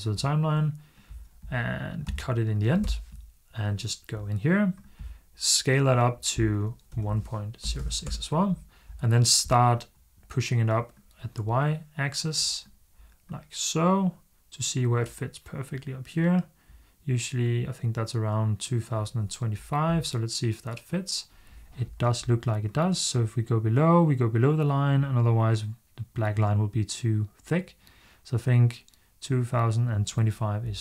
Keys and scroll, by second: 1.9 a, 2.6 BackSpace, 6.5-8.1 typing.